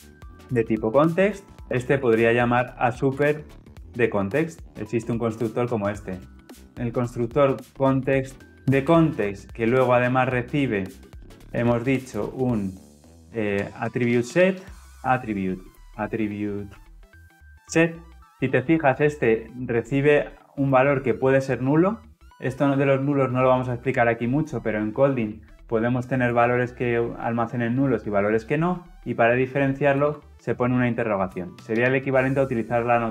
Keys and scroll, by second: 1.6 alt+Return, 2.4 Return, 7.0 Return, 8.8 Return.